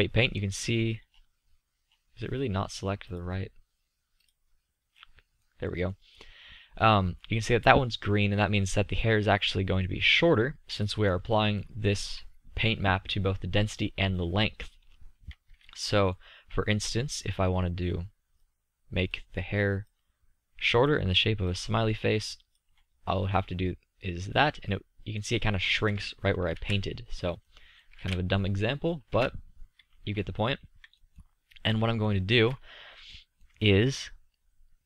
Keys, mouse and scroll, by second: 0.5-3.0 middle drag, 3.0-5.4 drag, 5.4-6.0 middle drag, 10.7-13.0 middle drag, 16.1-18.7 middle drag, 18.7-22.9 drag, 23.5 middle drag, 24.9-27.0 middle drag, 27.0 ctrl+z, 28.3 ctrl+z, 29.5 ctrl+z, 32.6-33.8 middle drag.